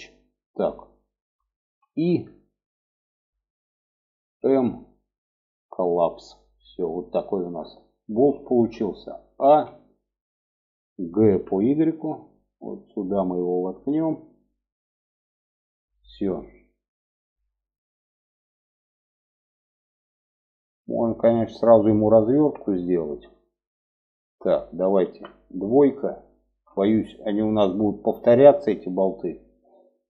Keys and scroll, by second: 1.0 i, 3.7 m, 8.7 a, 10.7 g, 24.4 2.